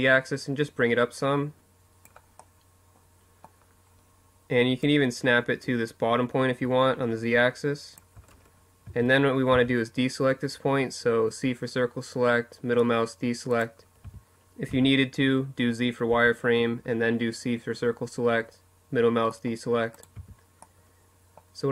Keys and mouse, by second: 1.2 middle click, 3.5-5.3 middle drag, 7.6 z, 8.2 c, 12.3-14.3 drag, 12.8 z, 13.4 z, 14.8 c, 18.7-20.0 drag, 18.9 z, 20.0-21.0 middle drag.